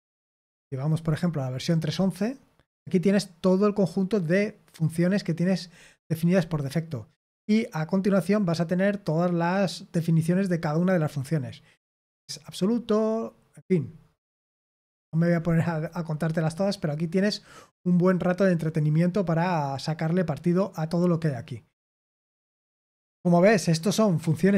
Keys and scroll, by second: 13.7-15.0 scroll down 1, 15.0-17.3 scroll up 1, 17.3-24.5 scroll up 1.